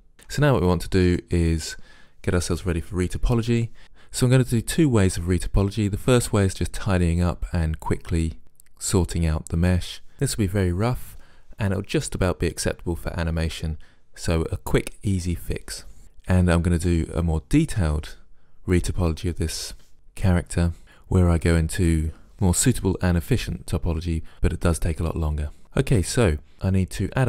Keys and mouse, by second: 0.1 middle click, 1.4-3.3 middle drag, 26.0 Tab.